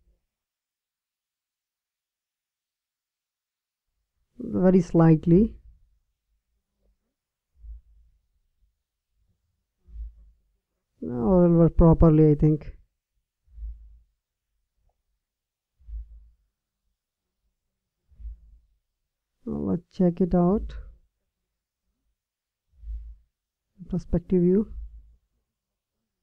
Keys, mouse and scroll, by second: 0.6 r, 7.5 r, 10.8 KP_7, 12.2 r, 16.5 KP_5, 18.5 KP_1, 23.3-25.0 middle drag.